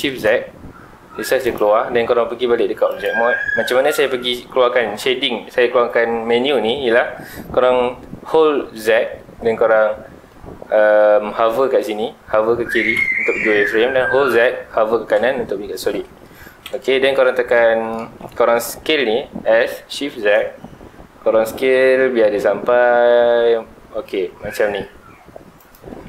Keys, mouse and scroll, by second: 1.5 click, 2.9 click, 4.1 z, 7.0 Escape, 7.0 z, 16.6 KP_7, 17.3 scroll up 2, 17.5 middle click, 18.1-19.1 scroll down 2, 19.1-19.6 scroll down 1, 19.6 s, 25.7 click.